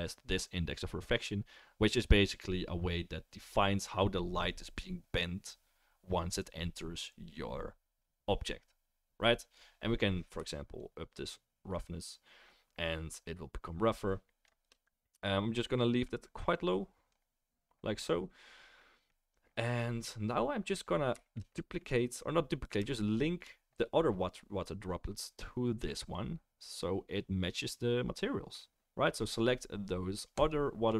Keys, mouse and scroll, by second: 3.8-30.5 middle drag, 30.5-30.9 right drag.